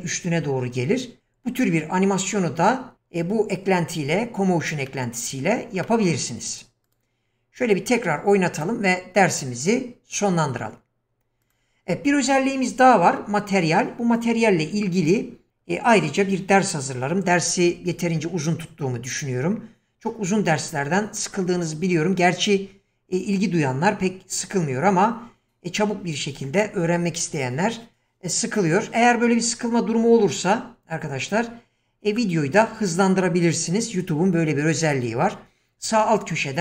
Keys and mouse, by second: 4.9-5.6 shift+middle drag, 5.8 middle drag, 6.9 drag, 8.6 click, 11.4 click.